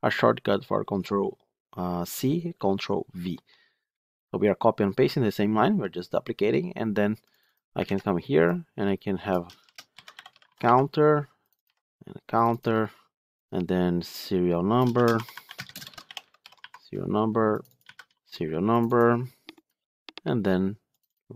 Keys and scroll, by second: 7.8 ctrl+c, 11.9 ctrl+c.